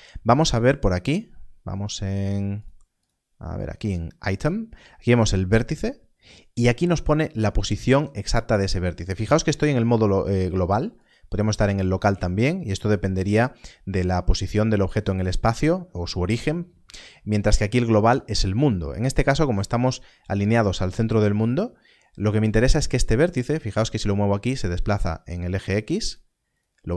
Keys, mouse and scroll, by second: 2.9 click, 10.9 click, 17.6 click, 23.3 click.